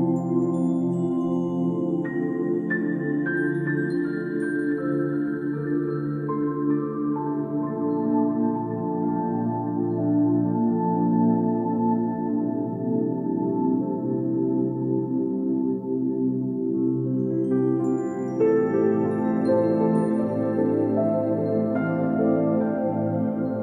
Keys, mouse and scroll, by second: 0.0-0.3 typing, 0.0 click, 0.1 middle click, 0.8 Return, 0.9 scroll up 1, 1.1 shift+middle click, 1.4 click, 1.5 scroll down 2, 1.5 shift+middle click, 1.8 click, 2.0 click, 2.1-3.6 typing, 2.5 shift+middle click, 3.3 scroll down 1, 3.3 shift+middle click, 3.7 ctrl+b, 4.4 middle click, 4.7 click, 4.8 click, 4.9 ctrl+z, 5.0 click, 5.6 ctrl+z, 5.6 click, 5.8 click, 5.8 scroll up 3, 6.0 shift+middle click, 6.1 ctrl+z, 6.2 click, 6.7 click, 7.1 middle click, 7.3 click, 7.4 scroll down 1, 7.6 shift+middle click, 7.8 click, 8.0 click, 8.9 click, 9.1 shift+middle click, 9.2 scroll down 2, 9.2 middle click, 9.4 click, 9.4 scroll up 3, 9.5 shift+middle click, 9.6 shift+middle click, 9.7 scroll down 1, 9.8 shift+middle click, 10.2 shift+middle click, 10.4 click, 10.8 shift+click, 11.0 e, 11.5 s, 11.6 middle click, 11.7 scroll down 2, 11.7 middle click, 12.0 click, 12.0 scroll up 2, 12.5 middle click, 12.9 click, 13.1 click, 13.2 scroll down 1, 13.4 scroll up 4, 13.5 shift+middle click, 13.6 shift+middle click, 13.6 shift+middle click, 13.7 click, 14.8 shift+click, 15.0 shift+middle click, 15.7 scroll down 2, 16.3 scroll up 2, 16.3 scroll down 4, 16.4 middle click, 16.5 shift+middle click, 16.7 scroll up 3, 16.7 shift+middle click, 17.6-18.0 scroll up 3, 17.6 shift+middle click, 17.8 click, 17.8 shift+middle click, 17.9 shift+middle click, 18.9 shift+click, 19.7-20.2 shift+click, 20.3 shift+middle click, 20.7 shift+click, 22.2 shift+middle click, 22.3 shift+click, 23.3 shift+middle click, 23.5 right click.